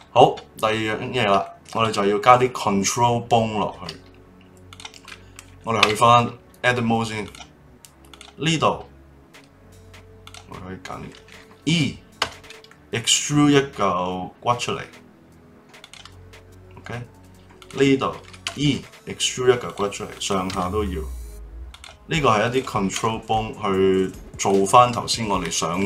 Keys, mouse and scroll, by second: 0.5-1.0 scroll up 1, 1.0-1.4 scroll down 1, 1.4-4.7 shift+middle drag, 4.7 click, 5.8 Tab, 7.2 click, 8.1 click, 10.2 click, 12.2 e, 17.6 click, 18.4 e, 20.1 click, 20.5 e, 22.4 click, 22.9 e, 24.9-25.8 middle drag.